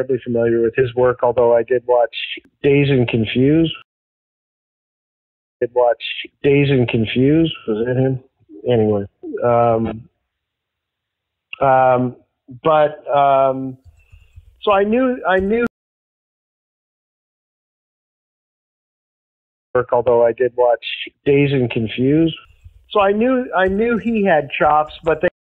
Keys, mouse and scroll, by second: 0.3 click, 1.7 click, 3.1 click, 3.8 space, 4.2 click, 5.4 click, 5.5 space, 9.3-15.6 drag, 15.5 space, 16.2 ctrl+shift+Delete, 17.3 click, 18.2 click, 19.5 click, 19.6 space, 23.6 click, 24.5 click, 25.2 space.